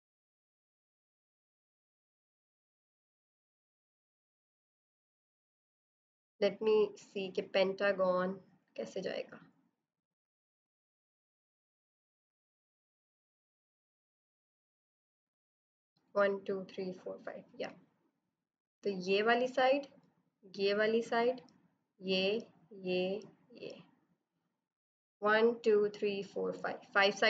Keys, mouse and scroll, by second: 0.0-2.2 typing, 0.1 click, 0.5 click, 1.1 click, 2.0 click, 2.1 click, 2.3 click, 2.5 click, 3.7 ctrl+d, 4.2 e, 4.3 click, 4.7 right click, 4.7 click, 5.0 b, 5.0 right click, 5.1 click, 10.8 click, 18.1 click.